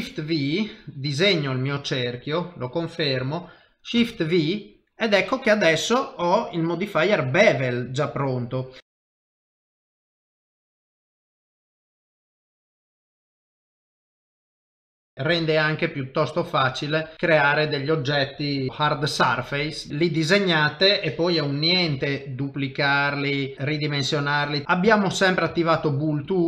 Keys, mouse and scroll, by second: 0.7 click, 4.5 middle click, 8.8 x, 8.8 KP_3, 9.1 shift+v, 9.8 click, 11.1 click, 12.0 click, 12.1 shift+v, 12.3 middle click, 13.0 ctrl+middle click, 13.1 middle click, 13.9 ctrl+shift+v, 14.4 ctrl+middle click, 14.5 middle click, 15.3 g, 17.7 click, 18.7 shift+d, 18.7 middle click, 19.9 ctrl+middle click, 20.0 click, 20.3 middle click, 22.0 shift+d, 23.5 s, 24.6 middle click, 24.6 click, 24.9 ctrl+middle click, 25.1 ctrl+middle click, 25.5 shift+middle click, 26.2 click.